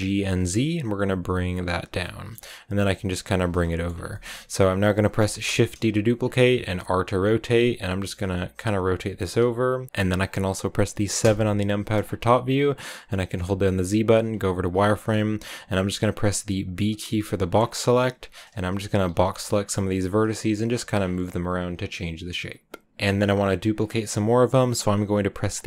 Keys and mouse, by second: 0.1 z, 1.6 click, 1.9 click, 2.4 g, 3.3 click, 3.5 middle click, 4.0 click, 5.3 shift+d, 6.2 click, 6.5 r, 7.1 click, 7.4 click, 8.2 r, 8.5 click, 8.6 r, 8.7 r, 9.1 click, 9.3 g, 9.6 click, 12.0 click, 12.0 KP_7, 14.4 z, 14.7 shift+click, 15.7 a, 15.7 b, 17.8 g, 18.4 click, 18.8 a, 19.0 b, 19.8 g, 20.2 click.